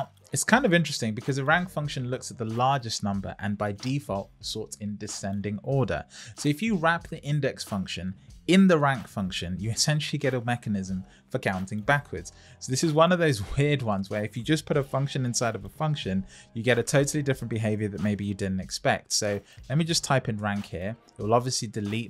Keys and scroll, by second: 14.9 shift+r, 20.3 Return.